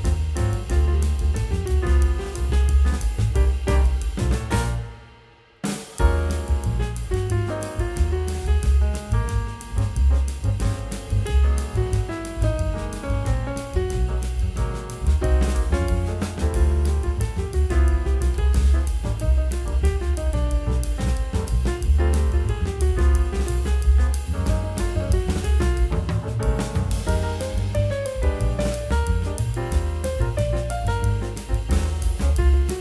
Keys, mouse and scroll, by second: 0.6 shift+click, 1.4 alt+middle click, 2.9 alt+click, 3.6 scroll up 1, 4.3 alt+scroll up 1, 20.5-21.2 scroll up 1, 21.2 middle click, 22.0-22.6 scroll down 1, 23.0-23.4 scroll up 1, 23.4 middle click, 24.2-24.7 scroll down 1.